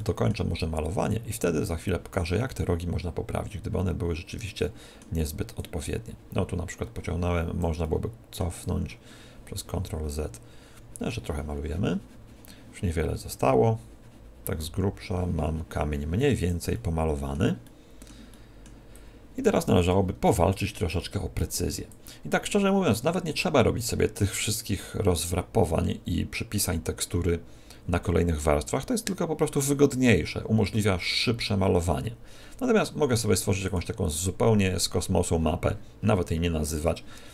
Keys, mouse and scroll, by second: 0.5 click, 2.6 click, 4.7 middle click, 5.2 click, 6.0 click, 7.9 middle click, 8.5 click, 16.8 middle click, 17.5 middle click, 18.2 middle click, 18.9 click, 20.3 middle click, 21.1 middle click, 21.8 click, 33.5 click, 36.8 Tab.